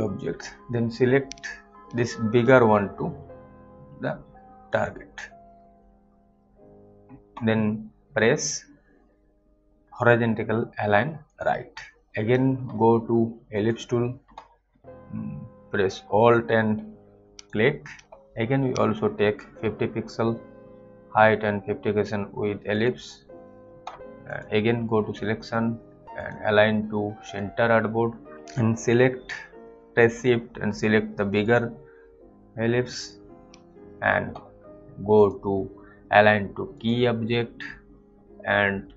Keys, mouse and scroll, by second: 4.7 click, 11.3 click, 13.5 click, 17.4 alt+click, 22.8 click, 30.1 click, 31.3 click, 31.4 shift+click, 35.1 shift+click.